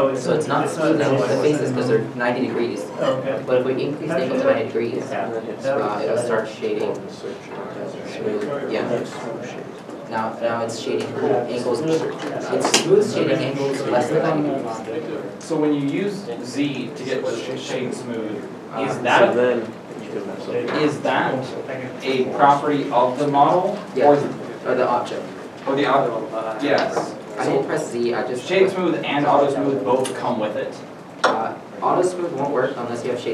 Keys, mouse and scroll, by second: 18.8 Tab, 20.1 z, 21.1 click, 28.5 z, 28.5 space, 28.9 s.